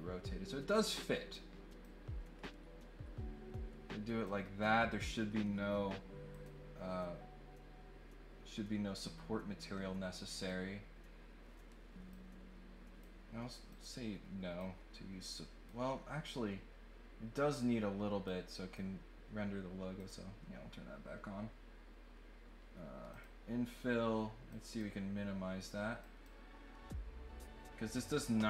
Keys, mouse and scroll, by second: 1.8-4.2 drag, 6.2 click, 12.1 click, 13.7 click, 14.6 click, 15.1 middle click, 18.2 click, 20.0 click, 23.1 click, 24.5 click, 25.9 click.